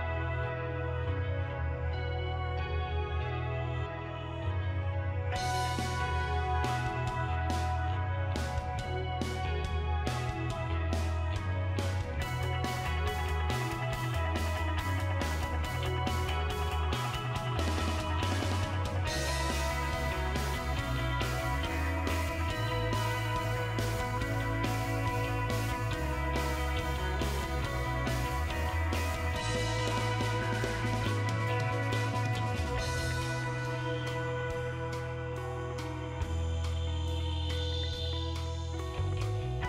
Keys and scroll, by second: 1.0 BackSpace, 1.5 0, 3.3-6.3 typing, 8.3 7, 9.9 BackSpace, 10.9 8, 11.9 BackSpace, 12.5 9, 13.6 BackSpace, 14.3 8, 15.6-16.3 typing, 24.9 Down, 25.1 Left, 25.7 Left, 26.2 Left, 26.4 Left, 26.7 Left, 26.9 Left, 27.3 Right, 27.5 Right, 27.7 Right, 28.5 BackSpace, 31.1 Right, 31.5 Right, 32.3-34.9 typing, 36.1 typing, 37.3 typing.